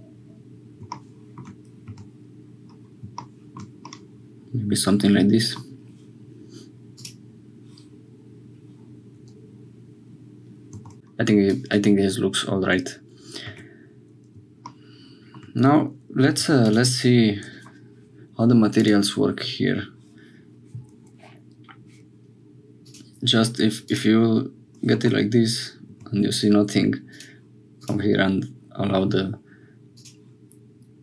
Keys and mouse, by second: 3.9-5.6 drag, 6.9 click, 10.7 Tab, 11.5 click, 13.5 Tab, 16.4 3, 19.4 click, 22.8-24.8 drag, 25.0 Tab, 25.9 Tab, 27.1-28.6 drag, 29.9-31.0 middle drag.